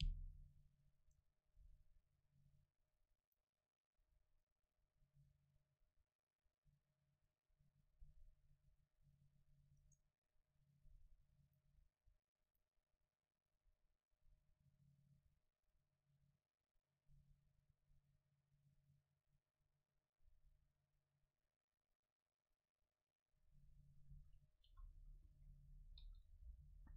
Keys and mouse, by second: 0.6-3.0 middle drag, 3.3-5.4 drag, 10.3-13.1 right drag, 11.4-14.3 middle drag, 13.1-14.7 drag, 24.2-25.3 middle drag, 24.8 a, 25.2 a, 25.4 a, 26.0 ctrl+s.